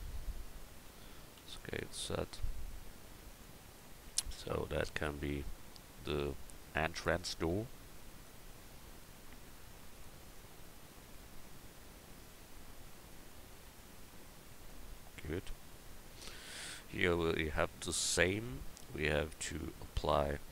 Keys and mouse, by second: 1.4 s, 4.4 Tab.